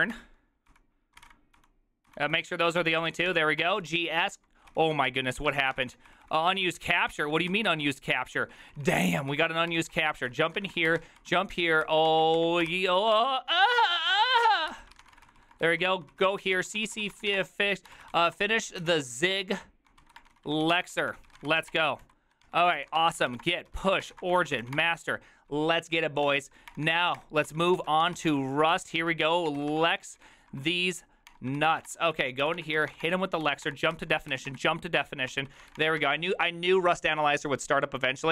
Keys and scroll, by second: 0.0-5.1 typing, 5.0 ctrl+w, 5.4 ctrl+w, 5.6 ctrl+o, 5.7 ctrl+c, 5.8 ctrl+:, 6.1 Return, 6.1-7.2 typing, 7.2 ctrl+d, 7.3 ctrl+d, 7.6 ctrl+d, 7.7 ctrl+d, 8.4-25.2 typing, 12.7 ctrl+c, 26.7 Return, 26.7-34.3 typing, 27.5 ctrl+c, 27.8 ctrl+p, 29.0 ctrl+p, 31.3 Return, 35.3 ctrl+c, 35.4-36.2 typing.